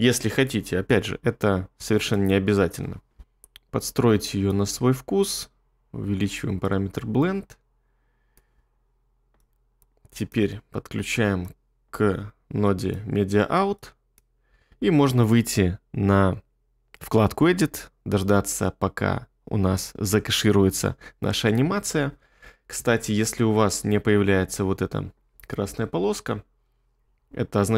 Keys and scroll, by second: 2.8 2.